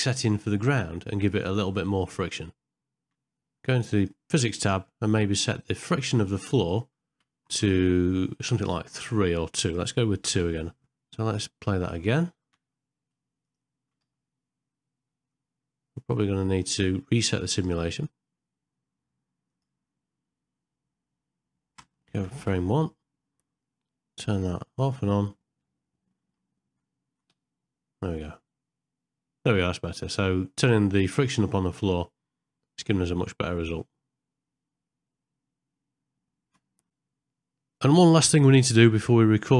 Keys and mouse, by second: 4.0 click, 6.7-10.8 drag, 12.5 space, 14.0 g, 19.5 click, 21.8 space, 22.3 shift+Left, 24.4 click.